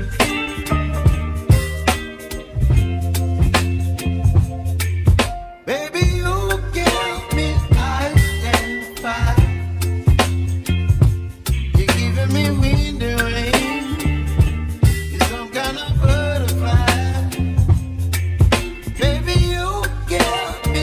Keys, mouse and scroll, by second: 11.4-13.9 middle drag, 16.2 g.